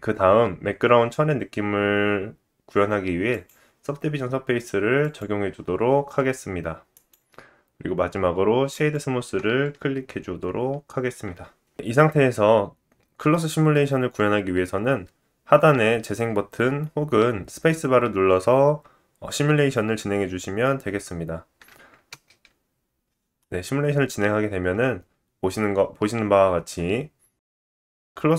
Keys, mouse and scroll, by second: 0.7 click, 5.0 click, 6.9 right click, 8.0-12.0 middle drag, 12.0-28.3 drag, 22.1 space, 23.3 middle click.